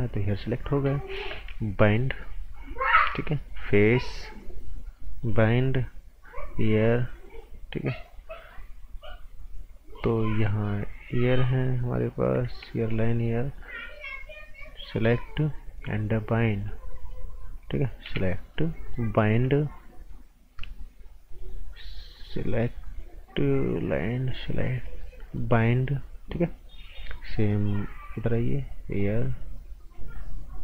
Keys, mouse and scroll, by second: 1.8 click, 4.9 right click, 6.3 click, 10.0 click, 12.8 shift+click, 14.9 click, 18.0 g, 18.5 click.